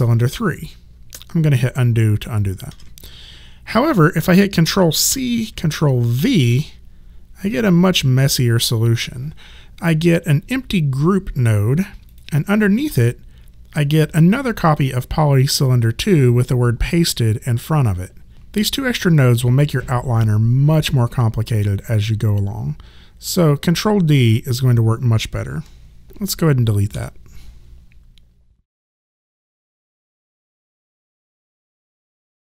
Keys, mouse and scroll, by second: 2.7 ctrl+z, 5.1 ctrl+c, 6.2 ctrl+v, 12.1 click, 26.9 Delete.